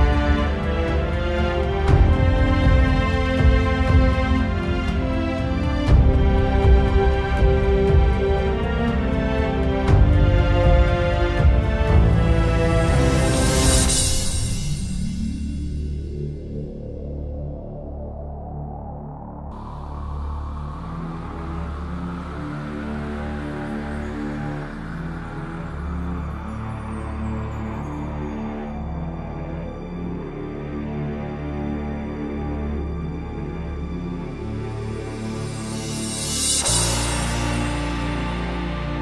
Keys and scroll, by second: 17.7 ctrl+j, 30.5 ctrl+z.